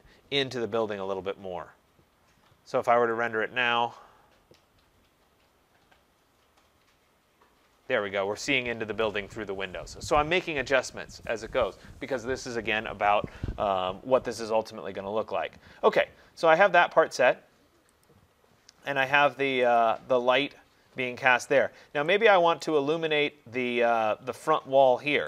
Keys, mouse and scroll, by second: 3.3 click, 18.1 click, 19.8 click, 22.7 right click, 23.2 scroll, 23.2-24.7 scroll down 4, 23.6-24.7 scroll up 1, 24.7 scroll up 3.